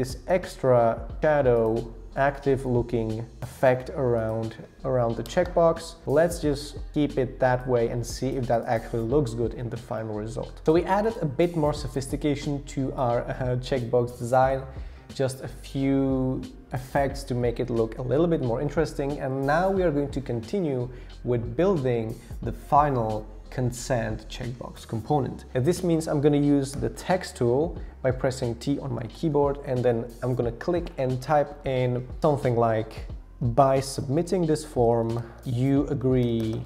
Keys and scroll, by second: 4.8-5.2 scroll down 1, 5.2 Return, 26.8 t, 33.4-36.6 typing.